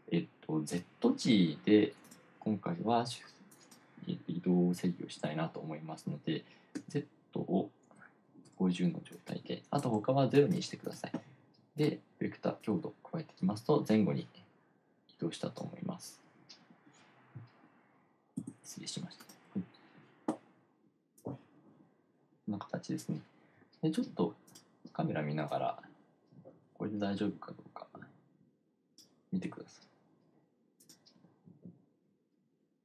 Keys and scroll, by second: 7.2 1, 8.4-9.3 typing, 10.4 0, 11.0 0, 20.0 F6.